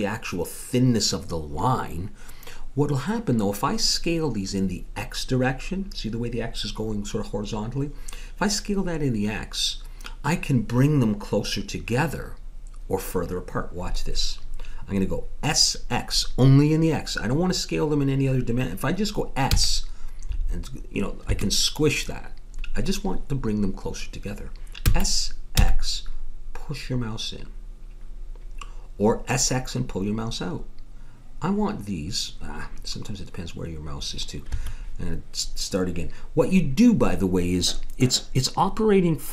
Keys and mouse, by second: 19.5 s, 24.8 s.